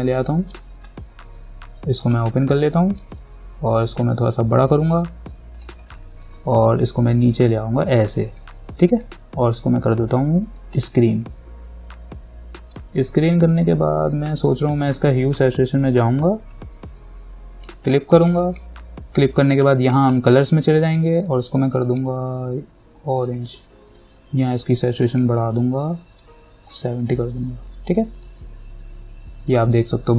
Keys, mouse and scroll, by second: 3.8-9.6 alt+drag, 15.6 click, 20.3-28.4 drag.